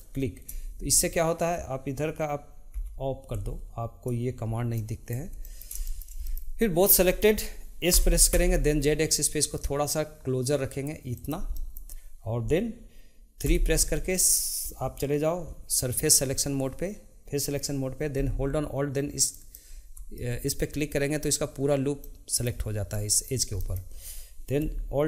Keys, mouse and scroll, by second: 2.9 t, 4.7-7.9 shift+middle drag, 7.9 s, 11.5-13.4 middle drag, 13.4 3, 19.3 alt+click, 22.0-25.0 middle drag.